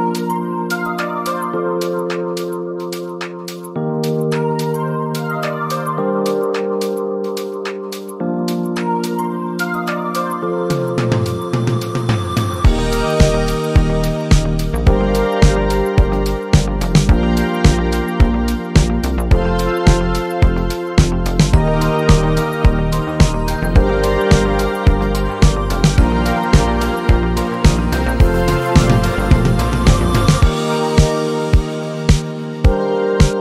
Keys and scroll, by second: 3.4 z, 5.8 space, 12.8 z, 19.8 Up, 20.3 ctrl+t, 30.4 Left, 32.7 Up.